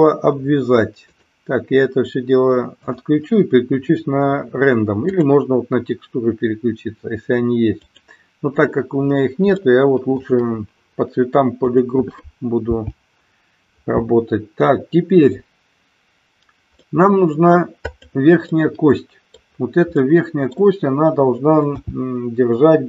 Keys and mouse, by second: 1.0 click, 2.8-8.5 drag, 9.5 shift+middle click, 11.7 click, 12.7 g, 16.8 middle click, 17.8 click, 18.4-19.4 middle drag, 19.9 middle click, 21.7 g.